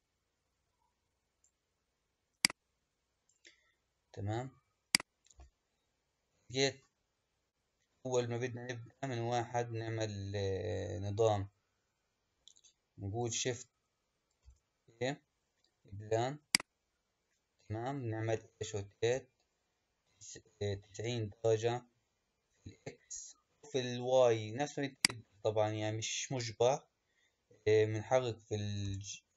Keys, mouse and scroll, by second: 0.0-4.8 drag, 5.2 n, 8.5-9.3 scroll up 2, 9.3-11.7 scroll up 1, 14.3 shift+a, 18.8 r, 28.7 g.